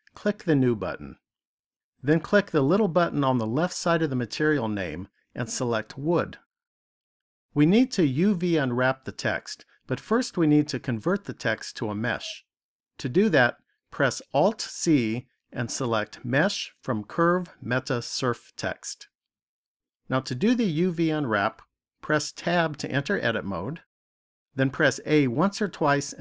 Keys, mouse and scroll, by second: 0.4 click, 3.9 click, 14.2 alt+c, 22.3 Tab, 25.4 a.